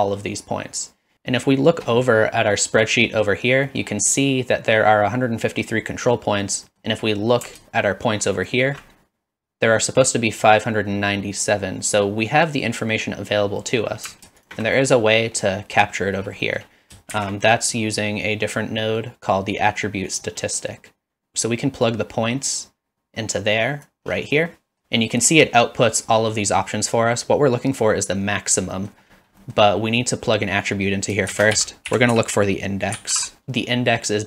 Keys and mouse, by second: 3.8 middle click, 6.7 middle click, 8.4 alt+shift+click, 13.8 middle click, 14.4 alt+shift+click, 15.0 middle drag, 16.6 middle drag, 17.1 shift+a, 21.9-23.9 drag, 24.5 middle click, 28.9 middle click, 29.4 middle click, 31.3 shift+a.